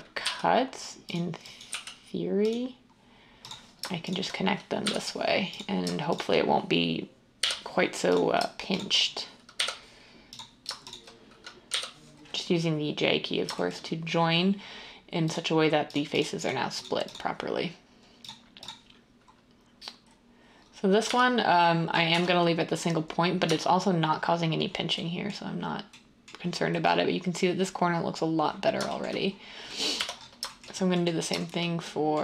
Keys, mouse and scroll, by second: 0.2 g, 1.8 g, 4.8 j, 7.4 j, 9.5 j, 11.7 j, 21.0 Tab, 22.1 Tab, 23.4 Tab, 30.0 Tab.